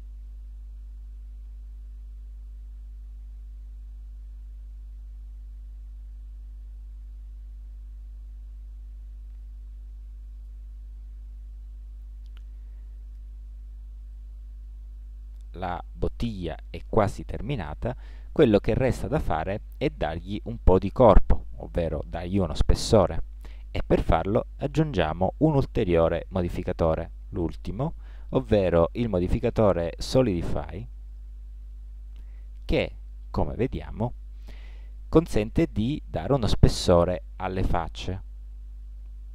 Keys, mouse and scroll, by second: 0.3-2.2 drag, 5.9-9.0 middle drag, 11.0 n, 16.9 middle click.